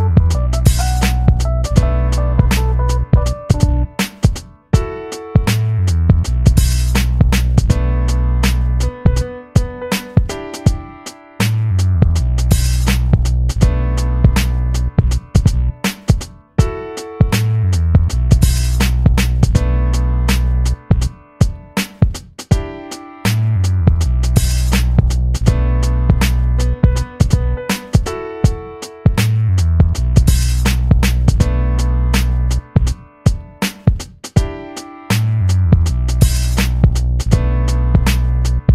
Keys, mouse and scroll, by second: 1.6-4.2 drag, 4.2 ctrl+z, 5.4 click, 6.2 shift+click, 8.4 ctrl+z, 9.7-21.8 drag, 22.3-27.4 drag, 27.4 right click, 30.4 click, 35.9-38.7 drag.